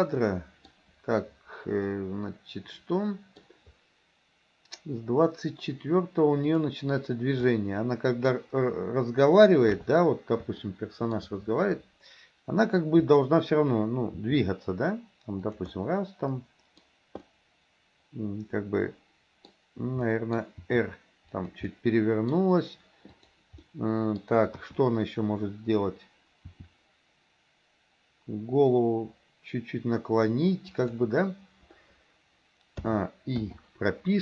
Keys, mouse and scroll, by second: 0.3-0.7 middle drag, 1.9-3.4 middle drag, 6.5 click, 7.7-8.4 middle drag, 9.7 KP_3, 10.7-11.2 shift+middle drag, 14.2 r, 15.8-16.8 middle drag, 17.3-19.5 middle drag, 20.2 middle click, 20.7 r, 21.7-22.4 middle drag, 23.7 middle click, 24.6 KP_1, 26.5 r, 33.4 a, 33.5 i.